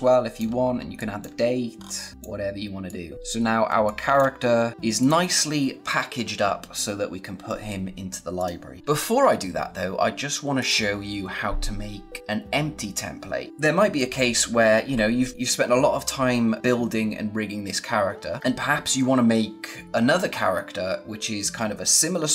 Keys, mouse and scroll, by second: 0.2 space, 0.9 click, 1.7-2.1 scroll up 1, 2.1 click, 3.1 scroll up 1, 3.5 space, 3.7 click, 4.0 space, 4.7 scroll down 1, 4.9 click, 8.3 click, 10.5 click, 13.5 space.